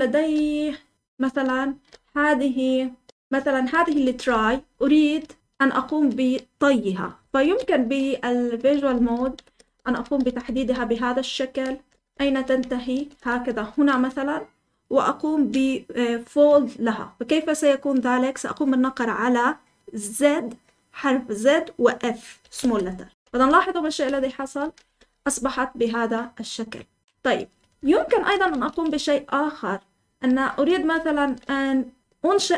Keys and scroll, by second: 0.0-5.9 typing, 7.3 typing, 8.6-13.8 typing, 22.1-25.2 typing, 27.7 Escape, 27.7-32.5 typing.